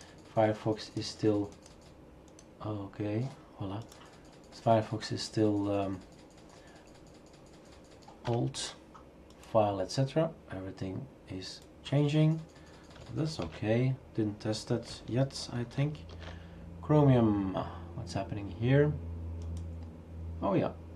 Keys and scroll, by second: 13.5 shift+super+q, 16.1 ctrl+alt+g.